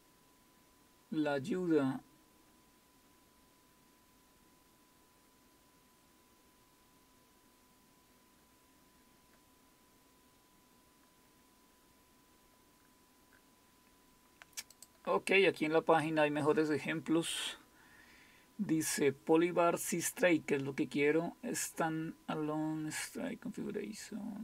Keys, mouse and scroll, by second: 5.6-6.3 scroll down 1, 6.3-7.2 scroll down 1, 7.2-8.8 scroll down 1, 8.8-11.0 scroll down 1, 11.0-11.7 scroll down 1, 11.7-14.7 scroll down 1, 14.7 scroll down 1, 14.8 click, 16.0-16.7 scroll down 1, 16.7-17.4 scroll down 1, 17.4-18.3 scroll down 1, 18.3-19.0 scroll down 1, 19.0 scroll up 1, 23.2-24.4 scroll down 1.